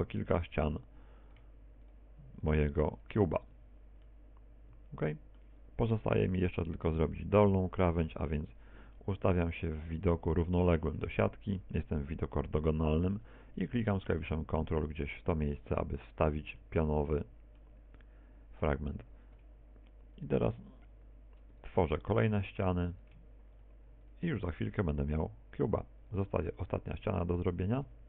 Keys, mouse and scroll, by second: 0.1 shift+right click, 0.9 right click, 1.5 shift+right click, 2.5 f, 3.3 right click, 3.9 shift+right click, 4.5 right click, 5.1 shift+right click, 5.7 f, 6.1 middle click, 9.4 right click, 9.4 KP_1, 10.8 shift+middle click, 11.6 z, 16.6 ctrl+click, 17.6 middle click, 18.6 middle click, 18.7 middle click, 22.2 shift+right click, 23.6 shift+right click, 24.0 shift+right click, 24.4 f, 25.0 right click, 25.6 shift+right click, 26.1 right click, 26.7 shift+right click, 27.3 f.